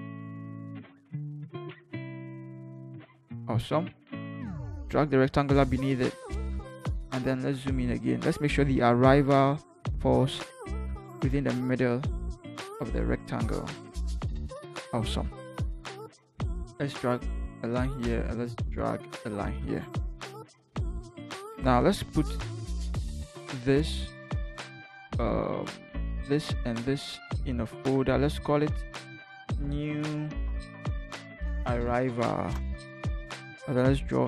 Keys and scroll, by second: 7.5 ctrl+=, 10.6 Up, 10.6 Up, 10.9 Up, 11.2 v, 11.3 Up, 11.5 Up, 11.7 Up, 11.9 Up, 12.0 Up, 12.2 Up, 12.4 Up, 12.6 Up, 13.0 Down, 27.7 ctrl+g, 29.3-32.3 typing, 32.6 Return.